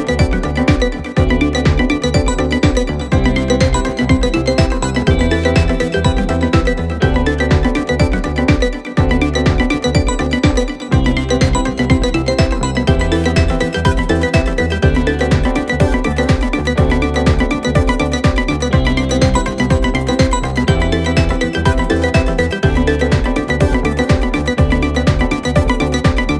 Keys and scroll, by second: 3.3 ], 5.2 4, 8.7 6, 9.3 9, 9.4 Return, 10.4 alt+3, 11.4 Delete, 12.0 alt+1, 15.1 Escape, 15.9 ctrl+z, 16.1 ., 17.1 ., 18.7 ], 25.4 Delete.